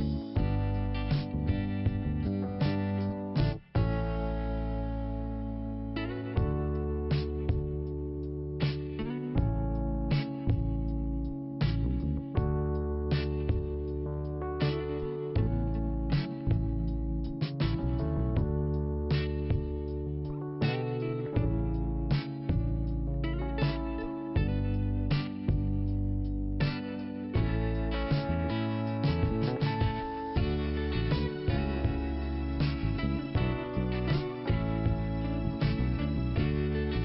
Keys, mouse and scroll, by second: 1.0 click, 2.1 click, 3.4 click, 4.8 click, 7.5 click, 9.2 click, 10.8 click, 12.8 click, 13.9 click, 15.3 click, 16.8 click, 18.1 click, 18.5 click, 20.3 click, 21.4 click, 23.2 click, 23.4 click, 25.4 click, 27.0 click, 29.4 click, 29.5 click, 30.2 click, 30.3 click, 31.1 click, 32.2 right click, 32.3 right click, 33.0 click, 33.1 click, 34.1 click, 34.4 click, 35.0 click, 35.1 click, 36.8 click.